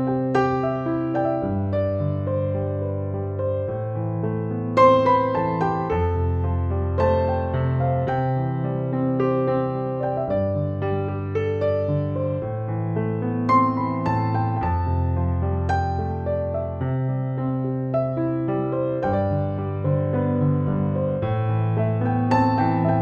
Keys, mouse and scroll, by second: 0.0-23.0 typing, 1.5 right click, 2.5-6.2 drag, 6.3 right click, 7.3 click, 8.2 ctrl+-, 9.4-10.2 alt+click, 12.9-14.2 alt+drag, 14.2 ctrl+=, 15.7-17.9 drag, 18.4 ctrl+-, 19.9-20.8 alt+shift+drag.